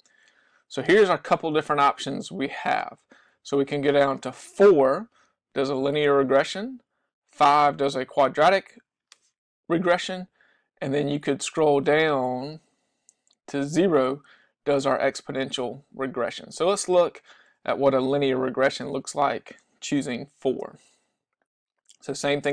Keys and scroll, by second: 3.0 Down, 3.3 Down, 3.8 Down, 10.1 Down, 11.0 Down, 11.3 Down, 11.6 Down, 12.0 Down, 12.5 Down, 14.9 Up, 15.1 Up, 15.4 Up, 15.7 Up, 16.0 Up, 16.6 Up, 20.6 Return.